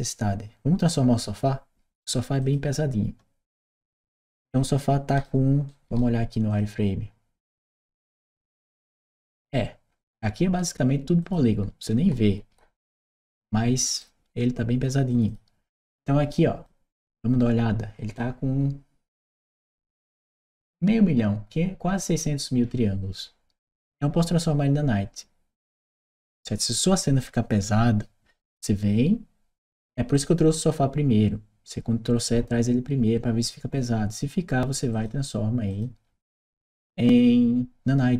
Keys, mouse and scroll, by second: 2.2 click, 3.3-5.0 right drag, 5.5 right click, 6.3 click, 8.3 click, 10.0 right click, 11.0 click, 11.7-13.8 right drag, 14.9 click, 15.1 click, 16.7-18.0 drag, 23.5 click, 34.7 click, 35.5 click.